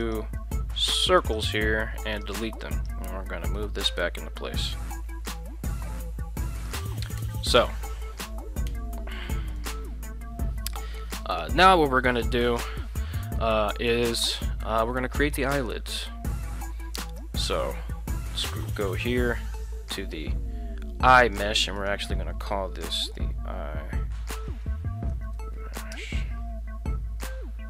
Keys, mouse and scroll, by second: 0.0 right click, 1.2 shift+right click, 2.0 x, 2.8 right click, 3.5 g, 6.6 click, 7.2 Tab, 8.7 Tab, 9.6 right click, 14.3 shift+middle drag, 17.0 right click, 21.2 drag, 21.8-26.7 drag, 25.9 ].